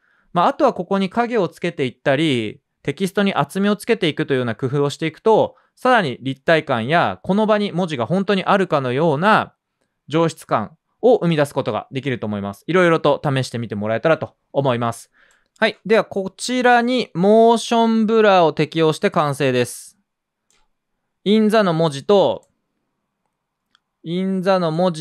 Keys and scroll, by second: 15.5 space.